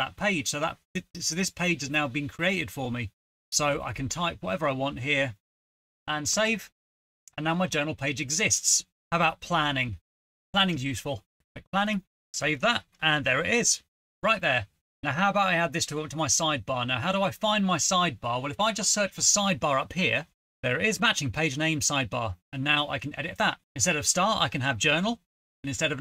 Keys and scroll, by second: 0.6-6.4 typing, 8.0-12.4 typing, 18.5-19.8 typing, 20.1 Return, 24.1-26.0 typing, 25.9 Right.